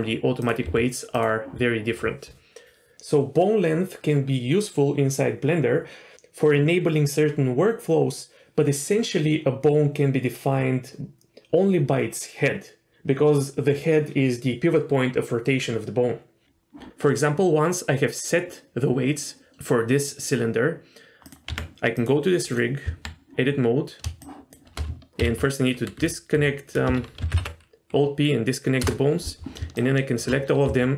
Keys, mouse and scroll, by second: 0.4 click, 0.6 r, 21.2 click, 21.5 Tab, 21.9 click, 22.4 click, 22.8 Tab, 24.2 shift+click, 25.2 ctrl+p, 27.3 alt+p, 29.8 shift+click, 30.6 s.